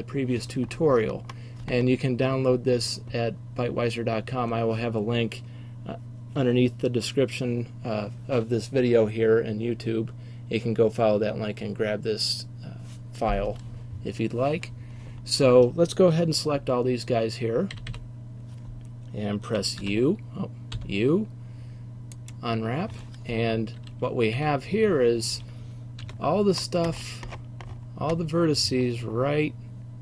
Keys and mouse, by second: 17.8 a, 18.0 a, 22.4 u, 24.4 a.